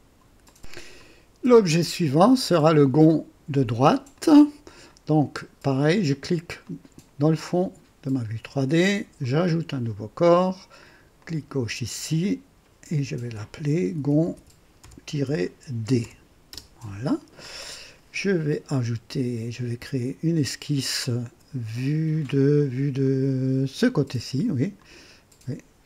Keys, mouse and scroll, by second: 0.4 click, 1.8-2.6 drag, 4.2-5.0 drag, 6.6 click, 9.2 click, 10.0 scroll down 2, 11.2 click, 13.3 F2, 13.7-17.2 typing, 19.8 click, 23.0 click, 24.8 click.